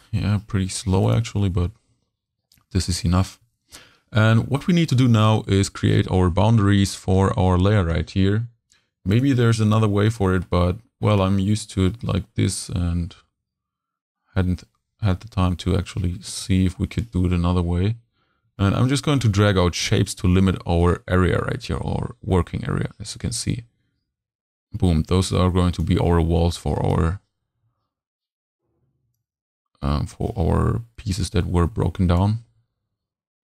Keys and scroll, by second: 32.5 v.